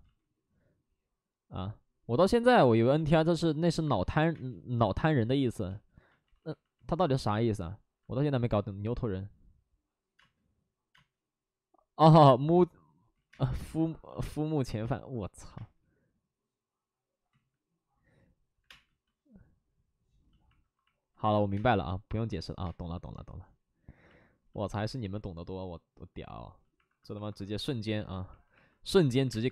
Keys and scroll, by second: 2.2 ctrl+z, 4.3 space, 5.7 space, 6.2 alt+s, 7.0 ctrl+z, 7.2 ctrl+z, 7.9 alt+s, 7.9 ctrl+z, 10.1 space, 12.2 space, 12.2 ctrl+z, 13.3 ctrl+z, 13.3 space, 17.2 ctrl+z, 18.5 5, 18.6 space, 20.5 alt+s, 21.4 1, 21.5 space, 26.3 space, 26.8 alt+s, 27.2 space, 27.5 alt+s, 28.3 alt+s, 29.1 1, 29.2 space.